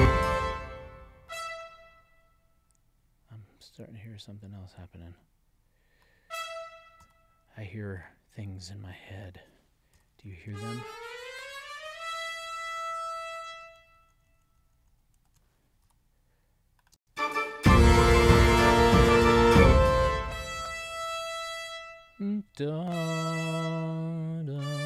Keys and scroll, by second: 10.5 alt+Up, 11.1 alt+Up, 11.7 alt+Up, 13.8 alt+Up, 16.9 space, 19.5 space.